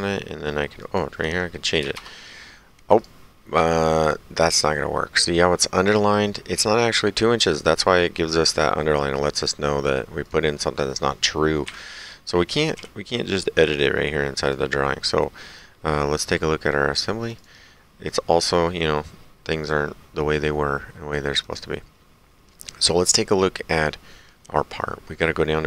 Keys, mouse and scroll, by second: 0.8 click, 1.8 KP_2, 2.0 Return, 4.0 click, 10.3 click, 11.7 Delete, 12.8 d, 13.4 click, 14.5 click, 15.5 click, 17.2 click, 21.4 click.